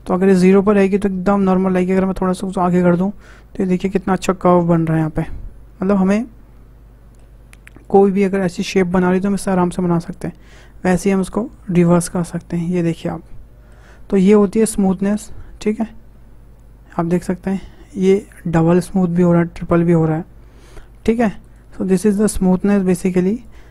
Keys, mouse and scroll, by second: 1.9-4.9 drag, 5.2-7.4 middle drag, 7.4 `, 10.1-12.4 drag, 12.4-14.5 middle drag, 14.5-17.6 drag, 22.0-23.6 drag.